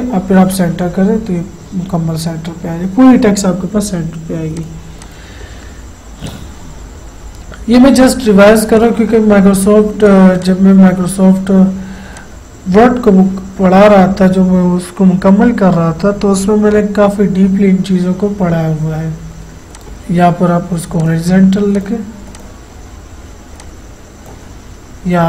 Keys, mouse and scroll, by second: 4.6 click, 8.8-13.3 drag, 19.8-25.2 drag.